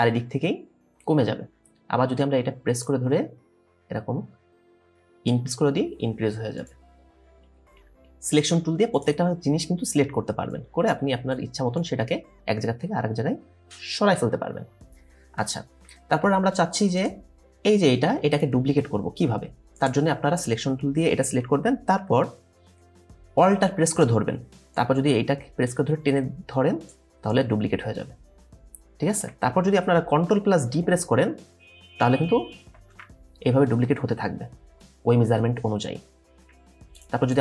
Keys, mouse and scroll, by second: 16.0-16.7 alt+scroll down 1, 30.8 ctrl+d, 32.6 ctrl+d, 33.4 scroll down 1, 36.1 alt+scroll down 1, 37.3 double click.